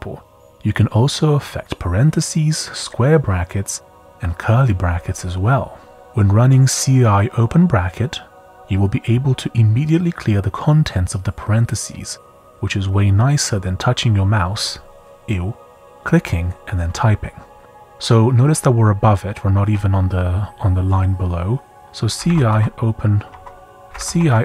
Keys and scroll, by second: 4.8 typing, 21.8-24.4 typing, 23.3 Escape.